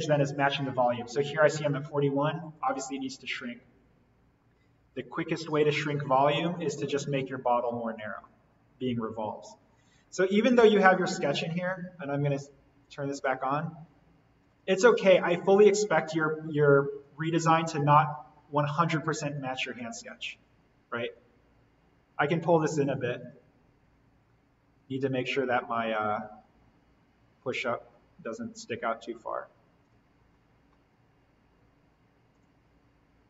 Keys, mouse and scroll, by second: 2.4 click, 5.6 right click, 6.4 click, 7.5 alt+n, 10.2 scroll down 1, 10.6 alt+v, 12.2 right click, 12.8 click, 17.0-19.1 drag, 23.2 click, 23.8 scroll down 1, 25.8-29.8 drag, 30.1-31.2 scroll up 1, 31.2-31.7 scroll up 1, 31.7-32.3 scroll down 1, 32.3 click.